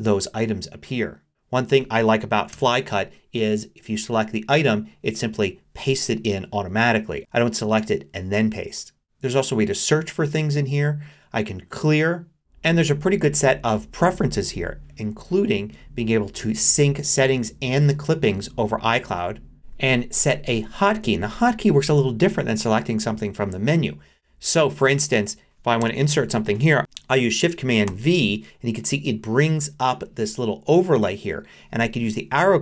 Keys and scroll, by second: 2.5 Return, 25.8 Return, 27.9 shift+super+v.